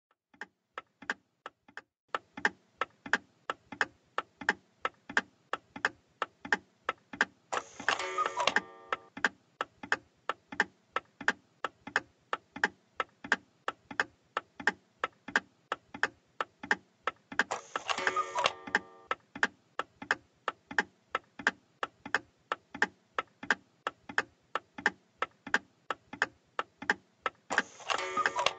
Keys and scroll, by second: 1.6 w, 2.9 s, 4.0 a, 4.4 w, 10.5 s, 11.7 w, 12.8 d, 19.3 s, 20.6 w, 21.6 a, 22.1 w, 24.7 w.